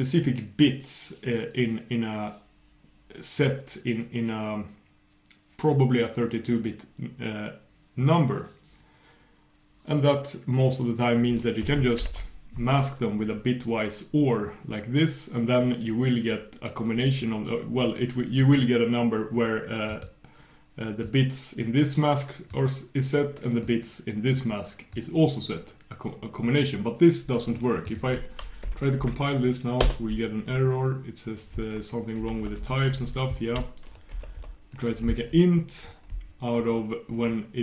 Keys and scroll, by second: 32.6 ctrl+super+k, 34.2 ctrl+super+k.